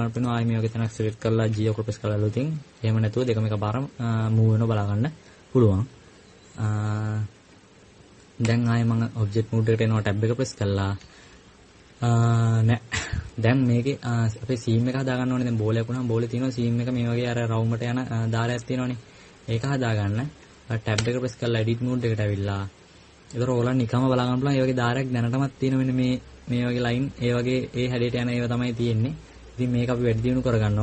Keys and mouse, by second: 2.6 right click, 9.2 Tab, 11.8 KP_Subtract, 12.0 KP_Subtract, 12.5 KP_Add, 16.2-17.7 middle drag, 21.7 Tab.